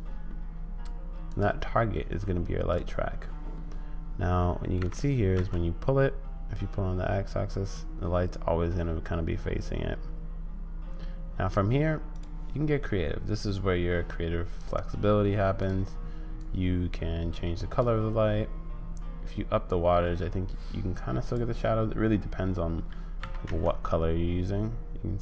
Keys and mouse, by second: 1.4-2.9 drag, 4.8 g, 14.5 click, 15.6 click, 19.8-21.4 drag, 23.2 g.